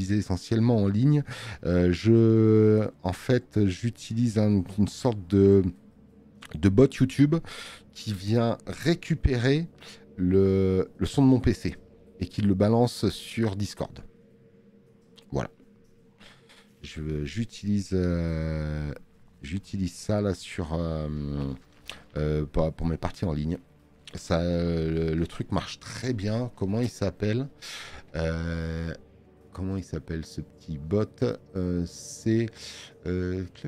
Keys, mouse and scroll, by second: 21.5 click, 25.1 space, 25.3 click.